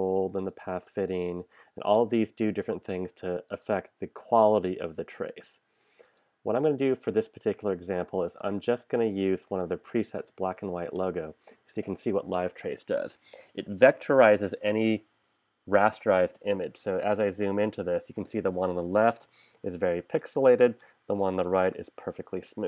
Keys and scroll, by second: 17.1 super+=, 19.7 space.